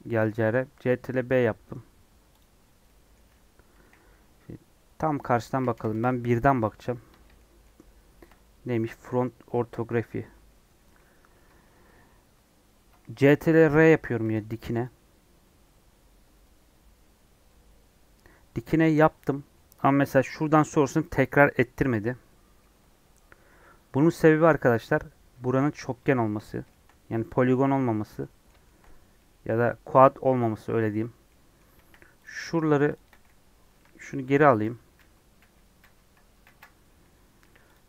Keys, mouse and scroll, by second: 2.8 middle click, 3.8 KP_1, 5.1-5.9 KP_1, 7.5-14.2 shift+middle drag, 14.2 ctrl+r, 17.4-25.1 middle drag, 25.1 3, 25.5 click, 26.6-28.8 shift+middle drag, 28.8 scroll up 2, 29.1-31.7 middle drag, 31.7 1, 32.2 click, 33.7 2, 34.1 ctrl+z, 34.3 ctrl+z, 34.6 ctrl+z, 34.9 ctrl+z, 35.3 ctrl+z, 35.7 ctrl+z, 36.4 ctrl+z, 37.4 1, 37.7 click.